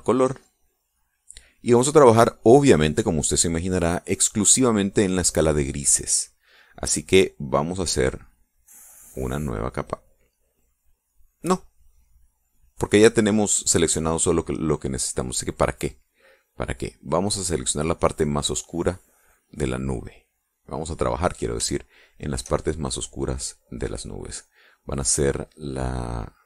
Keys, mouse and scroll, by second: 1.0 click, 5.5 click, 15.6 click, 17.2 click, 18.2-21.3 drag, 22.2 shift+click, 23.2 shift+middle click, 23.7 click, 24.7 click.